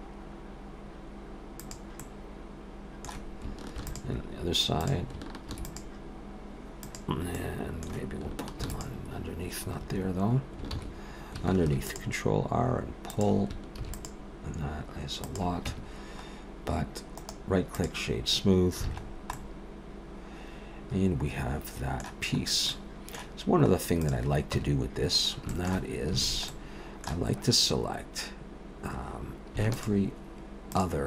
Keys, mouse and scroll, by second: 2.0 middle click, 3.7 ctrl+r, 5.5 ctrl+r, 7.4 middle click, 8.6 ctrl+r, 10.7 ctrl+z, 11.6 ctrl+r, 13.8 ctrl+r, 15.7 Tab, 16.3 scroll down 2, 17.1 right click, 18.9 alt+a, 19.0-20.0 scroll down 3, 19.3 middle click, 22.4 scroll up 1, 22.7 middle click, 24.0 click, 24.5 Tab, 25.1 scroll up 3, 25.5 shift+middle click, 26.2 alt+a, 26.5 middle click, 27.3-29.0 scroll up 2, 29.7 alt+shift+click.